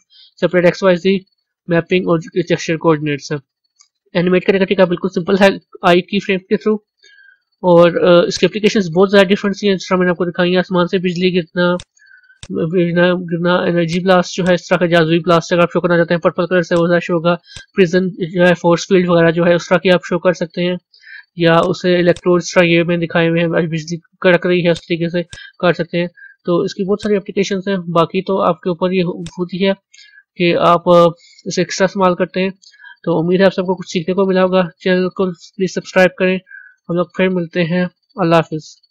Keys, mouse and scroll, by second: 12.3 click, 13.8-15.3 drag, 16.6 click, 17.5 click, 18.3-18.8 scroll up 3, 18.8-21.5 middle drag, 21.5 click, 22.0 click, 24.7 click, 26.9 click, 29.2-38.9 drag.